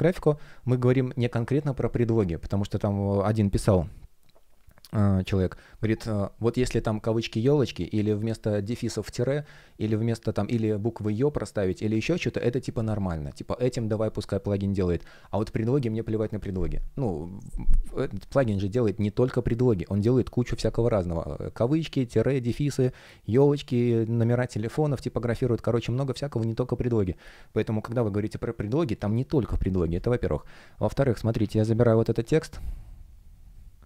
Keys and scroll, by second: 31.3 super+a, 31.5 super+c.